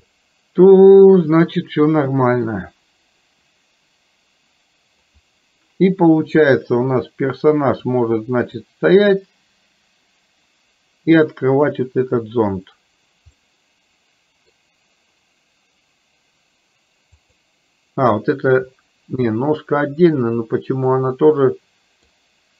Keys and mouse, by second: 0.3-5.2 middle drag, 7.0-8.4 drag, 8.9-12.2 drag, 13.4-14.7 middle drag, 21.0-22.0 middle drag.